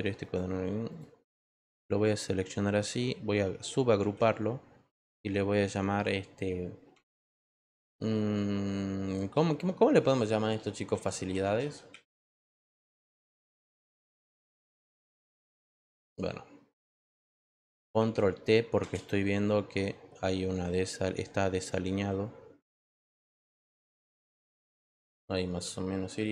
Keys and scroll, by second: 4.0 ctrl+g, 10.6-14.2 typing.